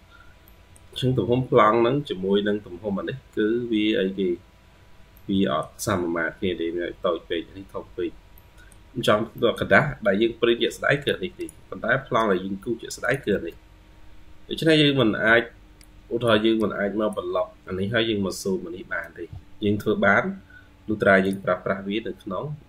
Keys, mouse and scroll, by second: 0.3 middle click, 1.1-1.6 scroll down 2, 1.6-3.3 scroll up 7, 3.4-4.2 scroll down 1, 4.2-4.8 scroll down 5, 5.0 middle click, 8.2 middle click, 9.2 middle click, 10.1 ctrl+q, 10.5 ctrl+click, 10.7-13.1 ctrl+q, 14.1 ctrl+q, 19.8 Escape.